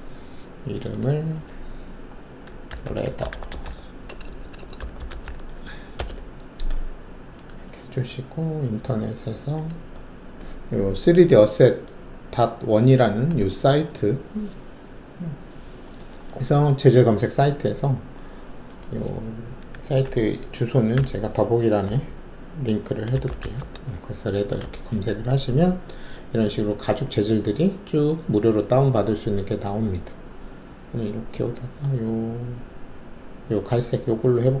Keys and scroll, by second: 2.6-5.2 typing, 5.9 Return, 20.9-23.4 typing, 24.5 Return, 24.5 typing.